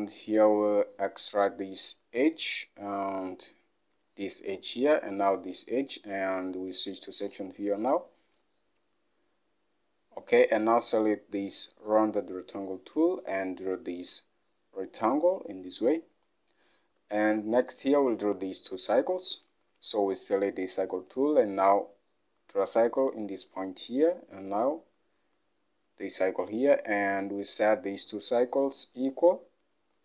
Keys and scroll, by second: 17.3 alt+Tab.